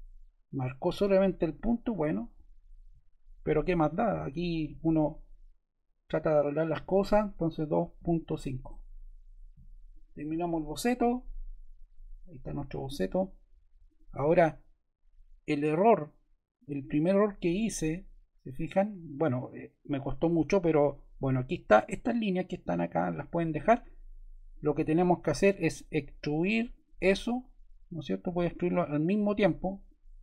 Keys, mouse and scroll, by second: 4.0 click, 6.4 click, 7.3-8.7 typing.